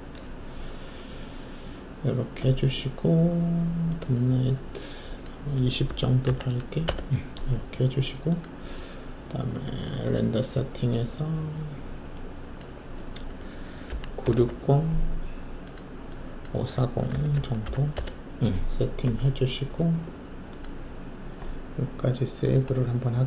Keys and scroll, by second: 5.8-6.2 typing, 6.8 Return, 13.8-14.3 typing, 16.8-17.6 typing, 17.9 Return.